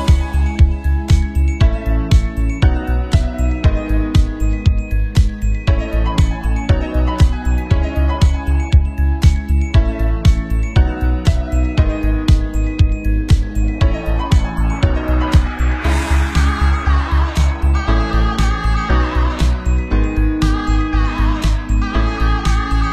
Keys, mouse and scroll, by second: 1.8-3.5 shift+middle drag, 3.3 Tab, 3.5 drag, 3.5 middle click, 3.5-5.0 typing, 4.2 shift+click, 4.3 Tab, 6.2 ctrl+z, 9.5 Tab, 10.0-17.2 typing, 10.3 alt+shift+middle click, 10.4 Tab, 10.7-12.3 shift+drag, 10.7 Tab, 11.1 middle click, 11.1 right click, 11.8 right click, 12.3 middle click, 12.6 shift+click, 13.4 middle click, 13.6 click, 13.7 middle click, 14.3 click, 14.9 middle click, 15.1-15.5 drag, 15.5 shift+middle click, 15.8-16.9 shift+drag, 16.9 middle click, 17.0 click, 17.2 middle click, 17.8 click, 18.1 middle click, 18.8 click, 18.8-20.3 middle drag, 19.2 shift+d, 19.3 r, 20.0 shift+d, 22.0 r, 22.1 shift+middle click, 22.4 shift+d, 22.8 click.